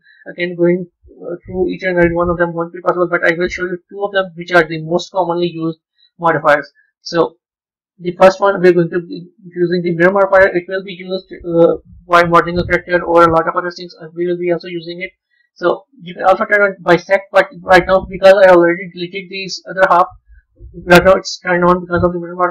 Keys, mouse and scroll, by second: 6.1-9.3 drag, 11.2 KP_1, 18.7 b, 19.4-21.9 middle drag, 21.9 click.